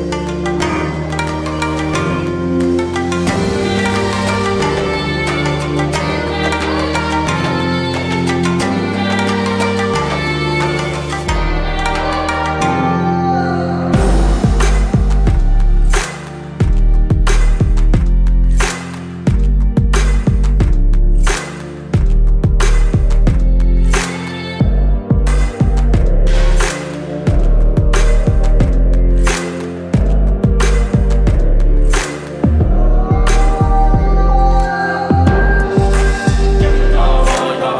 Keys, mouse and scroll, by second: 1.7-6.7 drag, 8.2 right click, 10.9 click, 13.4-16.2 drag, 21.3-25.7 alt+drag, 29.1-30.6 drag, 36.6 click, 36.6-37.7 alt+drag.